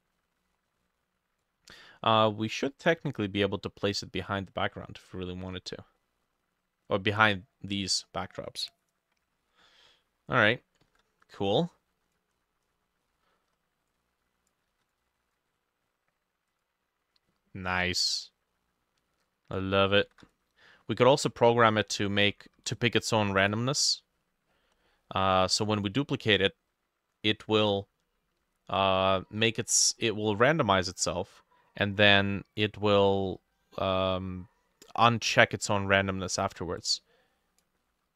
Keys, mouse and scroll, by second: 5.5-6.0 scroll down 5, 6.0 middle click, 9.4-9.8 scroll down 1, 9.8 middle click, 10.8 ctrl+middle click, 10.9 ctrl+d, 12.4-13.7 scroll up 15, 14.7 ctrl+d, 20.1 ctrl+d, 24.5-24.9 scroll down 5, 24.9 middle click, 33.8 middle click, 35.6 middle click, 36.5 ctrl+d, 37.8 middle click.